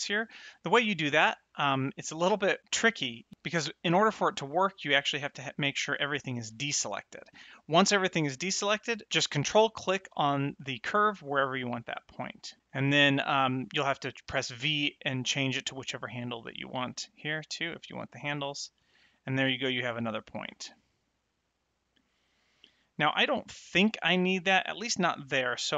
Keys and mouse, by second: 6.2 alt+a, 10.7 ctrl+click, 12.6 click, 14.2 v, 16.4 click, 17.7 click, 20.4 click, 21.9 click.